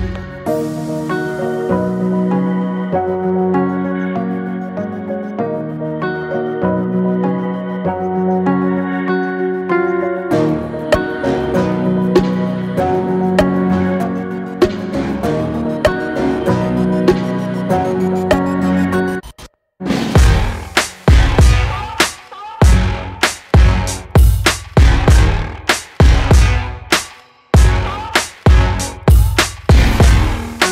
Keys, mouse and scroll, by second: 0.4 r, 3.7 scroll down 3, 4.0 shift+middle click, 4.8 g, 7.4 alt+middle click, 8.3 g, 10.9 click, 11.2-13.1 middle drag, 14.1 click, 15.0 s, 16.2 drag, 16.5-18.0 middle drag, 18.0 scroll down 2, 18.3-18.8 middle drag, 18.8 click, 19.1-19.5 middle drag, 19.5 scroll up 1, 19.8-20.2 middle drag, 20.2-20.7 scroll down 2, 20.7-21.5 shift+middle drag, 21.5-22.0 scroll up 1, 22.0-24.4 middle drag, 24.4 click, 24.6 a, 25.8 click, 26.5 Tab, 26.8 click, 30.6 middle click.